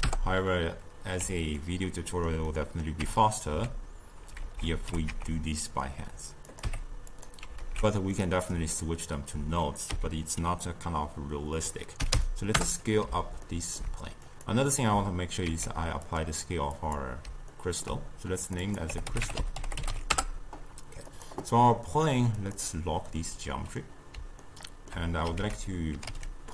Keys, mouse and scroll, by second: 1.6-3.0 ctrl+middle drag, 3.0 Tab, 3.5 a, 4.4 alt+z, 4.8 g, 6.7 Tab, 7.1 click, 7.6 alt+z, 8.1-9.9 middle drag, 9.9 s, 13.5-14.3 ctrl+middle drag, 14.3 click, 15.5 ctrl+a, 16.8 click, 17.6 ctrl+middle click, 18.5 click, 18.7-21.3 drag, 22.4 click, 23.2-25.4 middle drag, 25.4 ctrl+a.